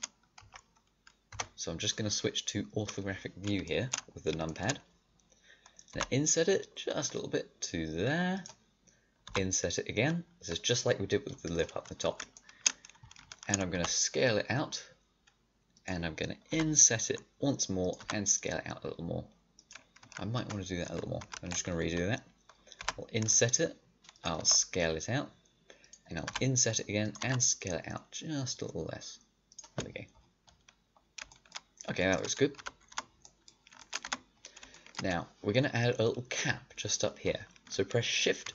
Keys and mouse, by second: 0.3 shift+KP_3, 1.2 KP_5, 4.8-6.8 middle drag, 9.2 i, 12.3 middle click, 13.7 s, 16.4 i, 17.9 s, 20.3 ctrl+z, 20.8 ctrl+z, 21.2 ctrl+z, 22.7 i, 24.3 s, 26.2 i, 27.1 s, 29.8 middle click, 31.3 middle click, 32.5 a, 32.9 Tab, 34.0 Tab, 38.4 shift+a.